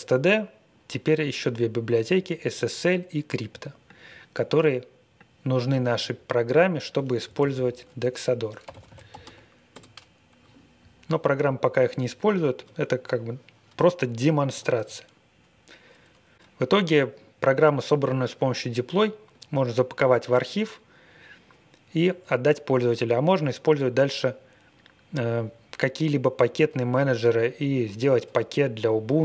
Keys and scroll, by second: 7.3 super+c, 8.3-9.6 typing, 9.7 Return.